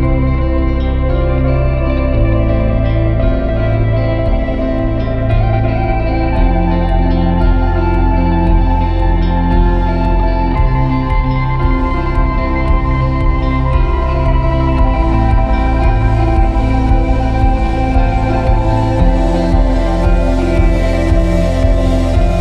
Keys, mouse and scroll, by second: 1.4 drag, 2.0 click, 2.3-5.3 drag, 7.0-8.7 drag, 8.7 BackSpace, 11.6-12.2 scroll up 1, 11.6-12.9 middle drag, 12.9 click, 14.5 click, 16.2-18.2 drag, 18.1-18.5 scroll up 2, 18.8 right click, 20.3 ctrl+KP_Add, 20.5-21.0 ctrl+KP_Add, 21.2 ctrl+KP_Add, 21.3 ctrl+KP_Add, 21.8 ctrl+KP_Add, 22.2 ctrl+KP_Add.